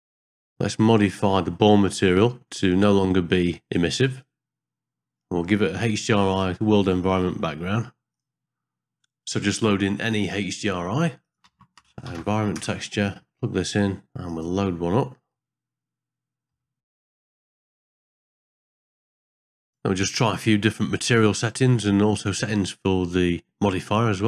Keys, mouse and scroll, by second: 0.0 click, 0.1 click, 0.2 middle click, 3.6 middle click, 8.2 click, 9.4 middle click, 9.9 click, 10.1 shift+a, 13.8 click, 14.3 click, 18.8 ctrl+t, 19.0 ctrl+middle drag, 19.3 shift+middle click, 19.4 ctrl+middle click, 19.7 click, 19.9 shift+middle click, 20.9 click, 21.1 click, 21.7 middle click, 21.8 middle click, 22.1 click, 22.3 middle click, 22.6 click, 23.1 middle click, 23.2 ctrl+middle click, 23.6 shift+click.